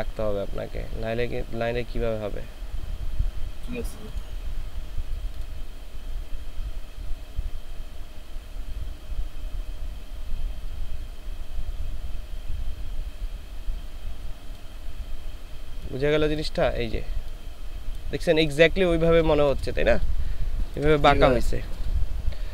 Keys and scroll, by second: 20.0 ctrl+space.